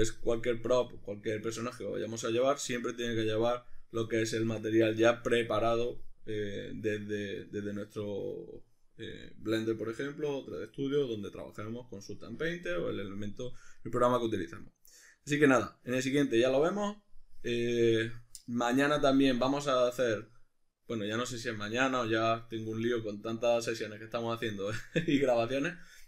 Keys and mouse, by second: 14.3 middle click.